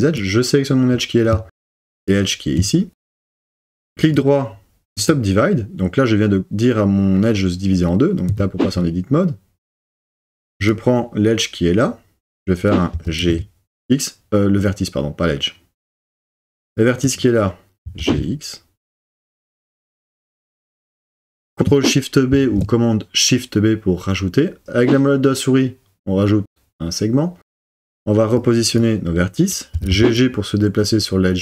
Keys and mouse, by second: 4.1-5.1 drag, 8.3 1, 12.9 g, 13.4 x, 17.8 g, 18.1 x, 20.4 click, 22.9 shift+super+b, 27.5 click, 29.7 g, 30.0 g.